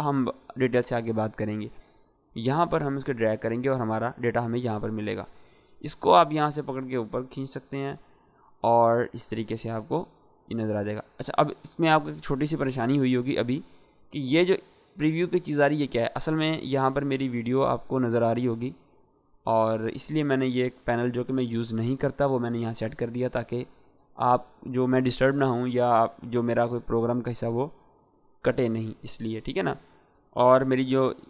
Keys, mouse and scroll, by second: 2.0-2.6 drag, 30.0-31.2 drag.